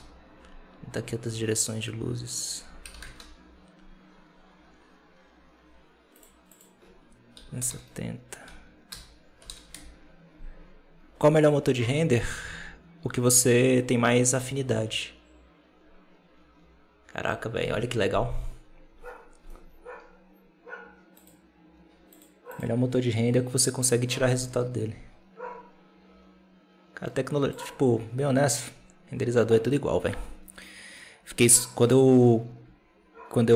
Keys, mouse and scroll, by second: 0.0 click, 2.2-5.3 drag, 6.1 click, 6.4-9.5 drag.